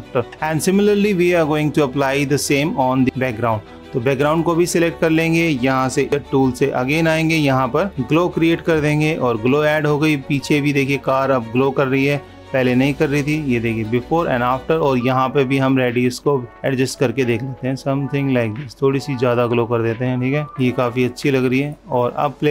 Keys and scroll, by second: 9.2 super+-.